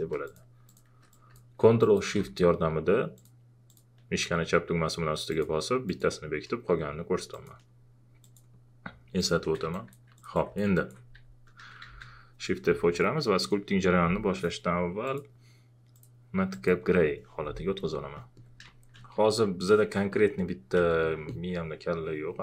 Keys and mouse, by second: 10.7 alt+click, 11.8 shift+f, 13.4 alt+click, 18.1 alt+click, 18.6-20.7 typing, 20.1 alt+click, 21.0 alt+click.